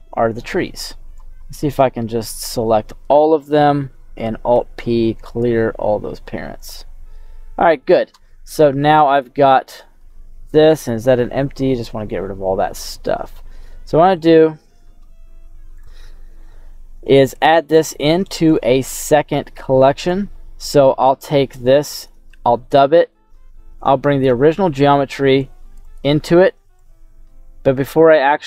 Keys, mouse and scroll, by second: 0.8 click, 1.4 middle click, 4.6 alt+p, 7.1 middle click, 8.1 middle click, 9.0 click, 9.7 middle click, 10.2-11.1 scroll up 3, 11.1-11.7 scroll up 1, 11.7 Delete, 12.2-12.7 scroll down 4, 13.5 middle click, 16.4-17.8 middle drag, 18.5 right click, 19.6 click, 20.3-21.2 scroll down 4, 21.2 click, 22.1 shift+d, 22.7 click, 23.2 middle click, 23.8-24.2 scroll up 4, 24.3 middle click, 25.7 click, 26.8-28.3 drag.